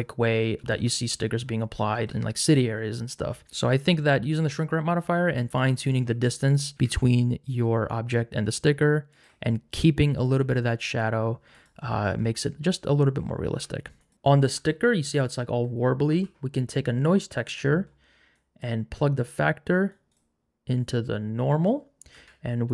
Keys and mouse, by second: 2.4 click, 6.3 click, 6.7 g, 6.7 z, 11.6 click, 14.1 shift+a, 18.4 click, 20.8 click, 22.1 shift+a.